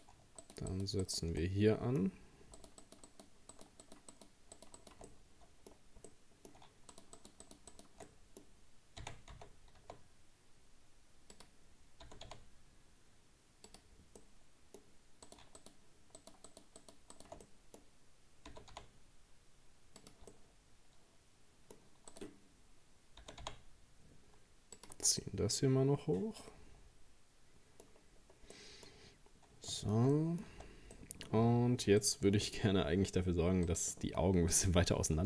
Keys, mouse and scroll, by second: 0.4 shift+right click, 0.7 shift+right click, 1.0 shift+right click, 1.4-2.6 middle drag, 2.6 shift+right click, 2.8 shift+right click, 3.5 shift+right click, 3.8 shift+right click, 4.1 shift+right click, 4.6 shift+right click, 4.8 shift+right click, 5.1-6.9 middle drag, 6.9 shift+right click, 7.2 shift+right click, 7.4 shift+right click, 7.7 shift+right click, 8.1 middle click, 9.0 r, 12.1 g, 14.2-15.3 middle drag, 15.3 right click, 15.6 shift+right click, 16.2 shift+right click, 16.5 shift+right click, 16.8 shift+right click, 17.1 shift+right click, 17.4-18.6 middle drag, 18.6 g, 20.3-22.1 middle drag, 22.1 right click, 23.2 g, 25.0 Tab, 25.2-27.9 middle drag, 27.9-28.5 scroll down 3, 28.5 middle click, 28.9-29.7 scroll up 2, 29.7 shift+middle click, 30.1-30.6 scroll up 1, 30.6 Tab, 31.0 middle click, 31.3-31.8 scroll up 1, 32.0-33.7 shift+middle drag, 33.7 right click, 34.5 alt+shift+right click.